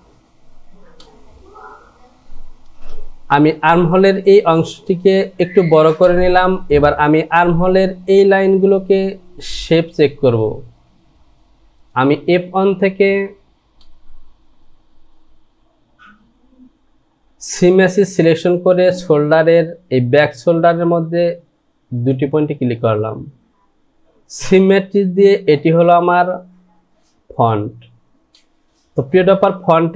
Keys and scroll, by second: 2.7 Return.